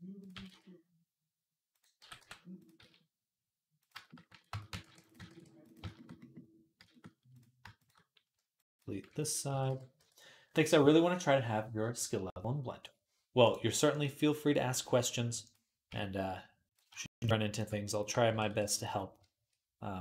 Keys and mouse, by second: 0.2 g, 1.8 g, 2.7 s, 4.3 Tab, 4.3 ctrl+click, 4.7 ctrl+r, 5.0-9.0 ctrl+middle drag, 5.1 ctrl+r, 9.0 ctrl+click, 9.1-13.3 middle drag, 9.3 x, 9.8 Tab, 13.3 click, 13.5 middle click, 13.9-16.9 drag, 15.7 Tab, 16.9 shift+middle click, 17.7 shift+click, 17.8-19.0 shift+middle drag, 18.1 e.